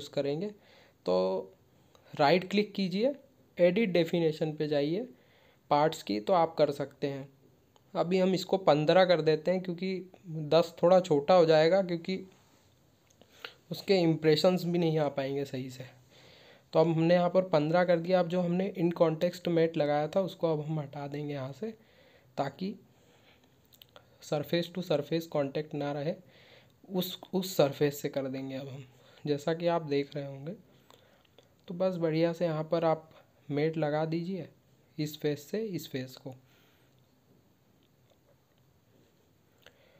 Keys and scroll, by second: 10.4 ctrl+q, 11.5 ctrl+w.